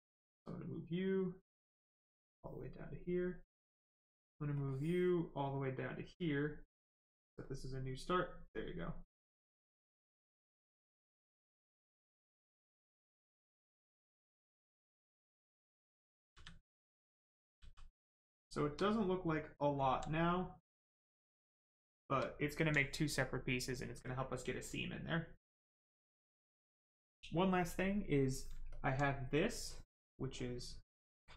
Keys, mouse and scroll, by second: 4.5 click, 6.9 click, 7.6 right click, 11.3 click, 16.3 d, 17.0 click, 17.6 d, 18.0 right click, 19.4 shift+click, 19.8 alt+right click, 21.3 right click, 22.2 alt+right click, 28.7 alt+click, 29.2 right click, 30.4 click, 31.2 right click.